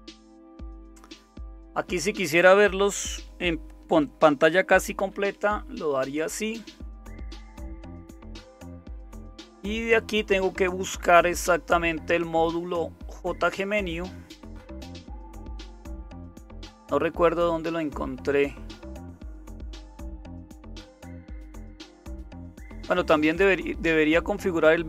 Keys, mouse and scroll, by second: 5.0 super+m, 11.2-12.0 scroll down 1, 12.0-13.1 scroll down 1, 13.1-13.8 scroll down 1, 13.8-17.9 scroll down 1, 17.9-18.8 scroll down 1, 18.8-20.8 scroll down 1, 20.8-21.8 scroll down 1, 21.8-23.2 scroll down 1, 23.2-23.8 scroll down 1, 23.8-24.8 scroll down 1.